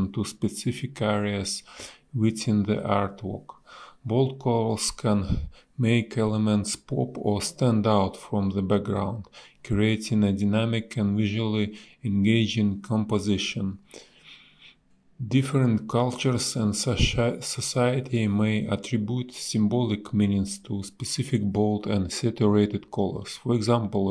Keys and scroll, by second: 6.3 space, 9.2 space, 10.4 Delete, 11.4 space, 12.8 space, 12.9 b, 15.1 space, 17.4 ctrl+z, 17.6 space, 20.7 space, 22.8 ctrl+z.